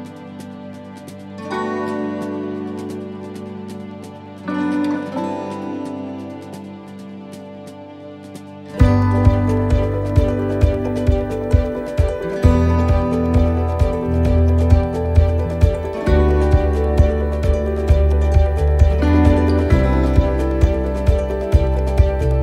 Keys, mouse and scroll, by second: 7.5 middle click, 8.9 click, 11.7 middle click, 12.0-12.9 scroll down 3, 12.4 middle click, 12.9-13.7 scroll up 3, 13.3 middle click, 15.2 click, 16.3 middle click, 19.6 scroll up 1, 20.0 middle click, 21.4 click.